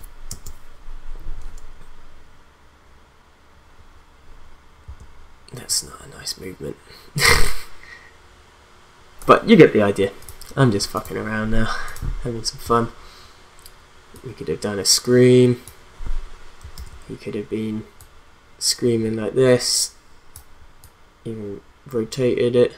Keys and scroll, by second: 0.3 space, 4.8 space, 16.7 ctrl+z.